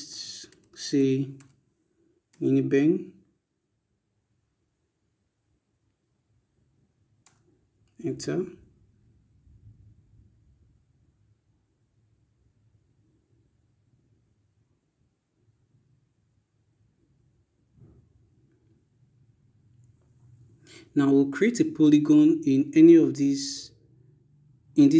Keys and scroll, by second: 0.0-1.5 typing, 6.4 Return.